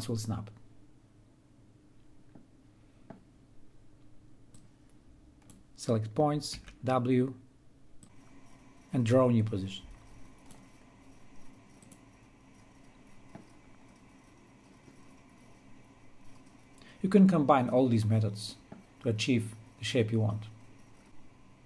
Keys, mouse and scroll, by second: 5.9-14.7 drag, 21.4 click.